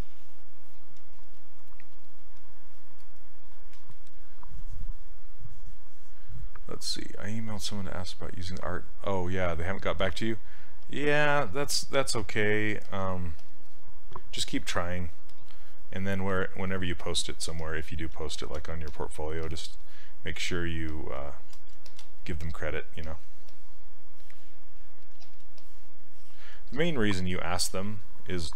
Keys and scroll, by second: 12.1 s.